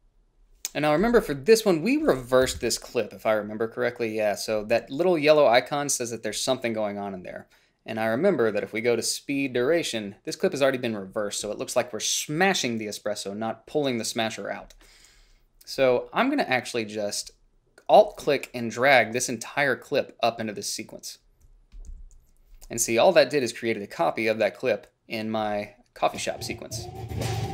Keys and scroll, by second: 2.7 =, 2.9 =, 22.2 a.